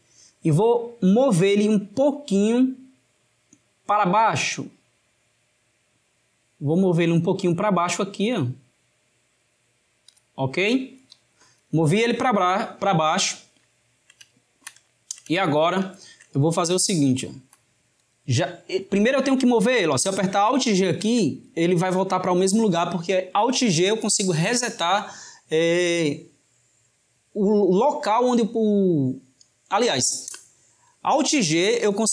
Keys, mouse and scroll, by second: 4.1 click, 13.5-20.5 shift+middle drag, 20.8 alt+g.